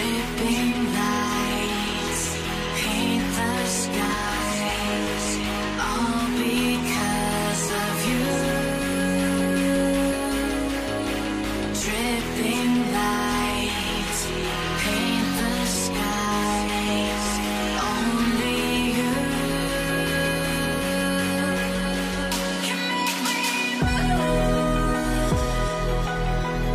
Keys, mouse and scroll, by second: 1.4-2.1 typing, 1.6 alt+scroll down 2, 4.2 shift+Up, 4.8 Down, 5.0 Down, 6.5 v, 7.4-8.5 scroll up 1, 9.8 alt+click, 10.5 b, 14.6 ctrl+z, 15.7 v, 16.0 right click, 18.5 double click, 24.5 b.